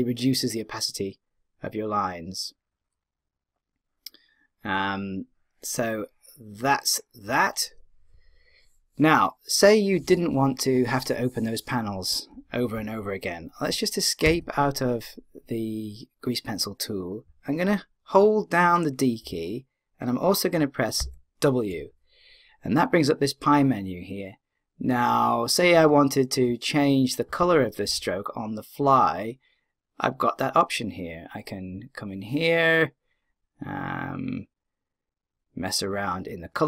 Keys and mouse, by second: 19.2-20.9 d, 21.0 w.